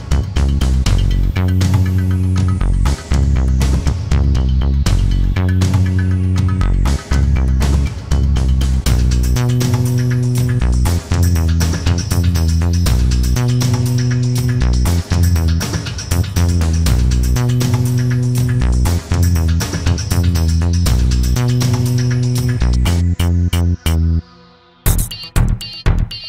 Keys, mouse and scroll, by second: 3.1 ctrl+scroll up 1, 4.0-5.1 ctrl+drag, 6.2 ctrl+d, 10.1 click, 12.2-16.2 ctrl+drag, 18.0 click, 19.8-22.2 drag, 24.4 click.